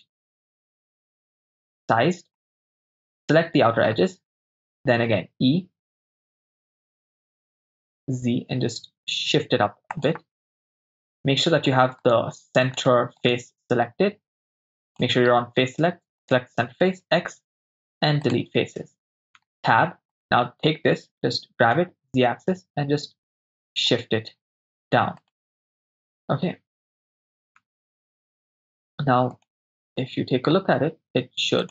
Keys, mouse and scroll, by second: 0.7 shift+right click, 1.3 shift+click, 1.3 right click, 2.5 shift+click, 2.5 shift+right click, 3.3 middle click, 5.1 e, 10.0 click, 11.1 click, 12.0 right click, 12.7 right click, 13.3 right click, 14.9 click, 16.3 right click, 17.0 x, 19.4 Tab, 20.3 right click, 21.3 g, 21.8 z, 25.2 click, 25.7-27.2 middle drag, 27.7 Tab, 28.0 Tab, 29.4 click, 29.8-30.5 middle drag.